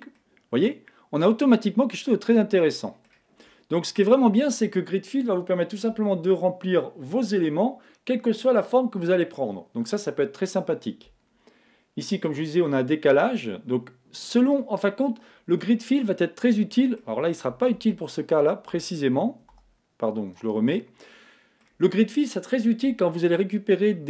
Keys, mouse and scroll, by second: 0.2-1.8 middle drag, 3.8-5.4 middle drag, 12.3-14.1 drag, 15.6-17.4 middle drag, 17.7 super+z, 19.5 space, 21.1-22.8 middle drag, 23.0 middle click.